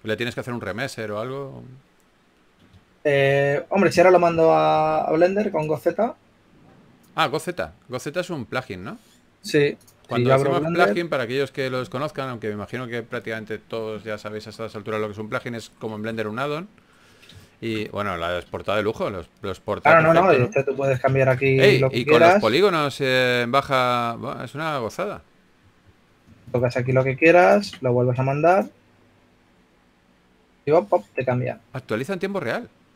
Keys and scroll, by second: 1.8 2, 18.4-19.1 typing, 20.3 Tab, 22.1 g, 25.8 2, 27.1 g, 27.7 Tab.